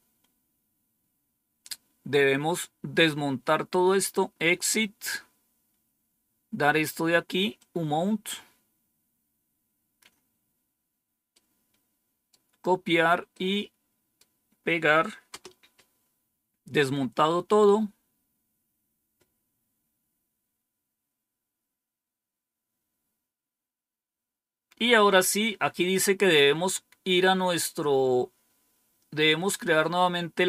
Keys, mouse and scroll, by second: 1.6-2.6 scroll down 2, 2.6-3.8 scroll down 1, 4.7-6.0 scroll down 3, 7.5-9.9 drag, 11.2-12.2 right drag, 13.2 right click, 15.2 Return, 18.0-19.1 scroll down 2, 20.4-21.1 scroll down 2.